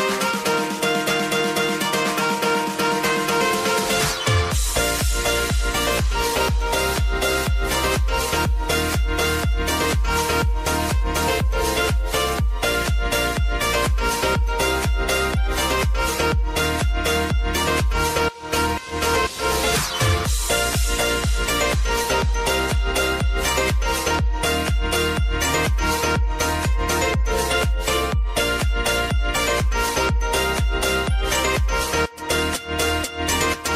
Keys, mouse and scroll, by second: 0.0 space, 2.3 click, 2.8 ctrl+d, 3.2-7.1 drag, 7.1 space, 10.1 space, 10.7 click, 10.9 -, 11.1 space, 15.4 click, 16.4 F4, 17.3-19.5 drag, 19.5 space, 29.7 space, 30.1 click, 30.4 space.